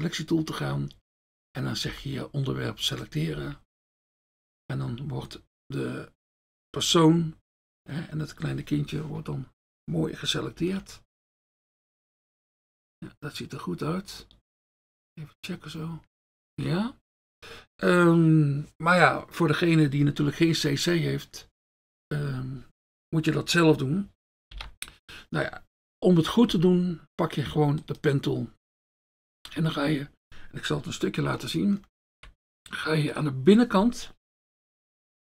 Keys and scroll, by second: 3.4 F1, 24.6 ctrl+d, 29.1 F1.